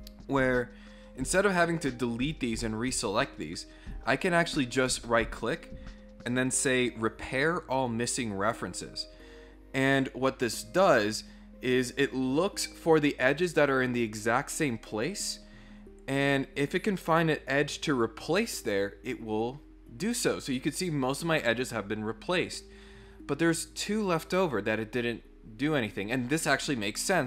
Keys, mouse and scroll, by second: 4.9 right click, 7.5 click.